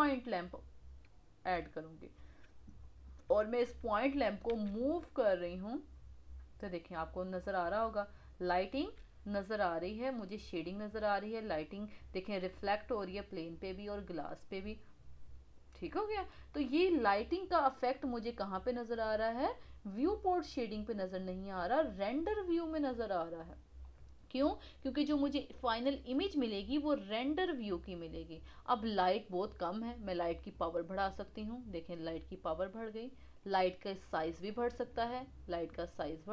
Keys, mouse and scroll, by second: 2.2 KP_1, 4.5 g, 7.4-8.8 middle drag, 8.8 g, 14.1-15.9 middle drag, 16.3-17.8 middle drag, 17.8 click, 21.5 click, 23.8-26.8 middle drag, 30.5-33.5 drag, 34.2 click, 34.8-36.3 drag.